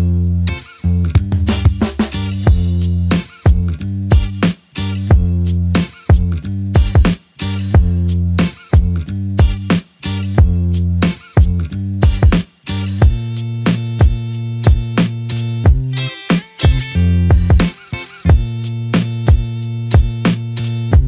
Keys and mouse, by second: 2.3 shift+click, 7.2 shift+click, 11.2 shift+click, 14.8 shift+click.